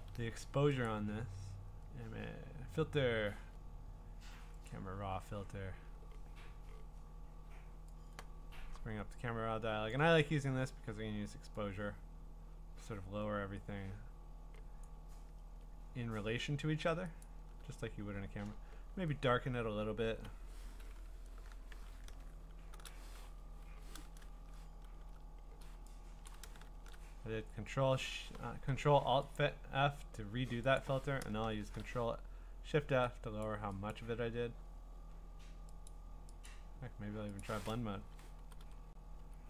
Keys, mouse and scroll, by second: 0.1 Escape, 0.9 click, 4.7 click, 9.9 click, 14.8 click, 15.4 Return, 17.2 click, 18.2-20.0 scroll, 22.3 ctrl+shift+f, 23.7 Escape, 24.9 ctrl+alt+f, 26.3 ctrl+alt+f, 26.7 click, 28.4 Escape, 29.4 click, 31.6 ctrl+shift+f, 33.5 click, 33.9 click, 35.9 click, 36.5 click, 37.4 click, 39.2 Up.